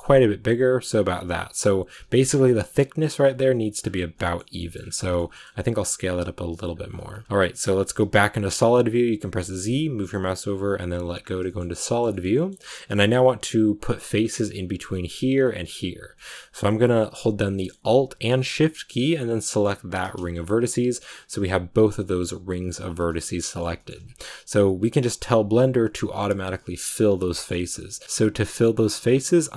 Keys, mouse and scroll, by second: 1.8-2.5 scroll up 6, 2.0 shift+middle click, 3.7 scroll down 5, 4.0 shift+middle click, 4.7-5.3 scroll up 5, 5.0 shift+middle click, 5.7 s, 6.7 scroll down 3, 7.0 middle click, 7.2 z, 8.3 z, 11.1 scroll down 2, 11.3 shift+middle click, 12.1 shift+scroll down 1, 12.2 middle click, 12.7 scroll up 2, 13.7 middle click, 14.1-14.6 scroll down 2, 16.0 shift+middle click, 16.5 scroll up 1, 17.4-19.6 middle drag, 19.6 alt+shift+right click, 20.2 scroll down 2, 20.4 middle click, 20.9-23.0 scroll up 2, 23.0-28.0 shift+middle drag, 28.0-29.2 scroll up 2, 29.2-29.5 middle drag.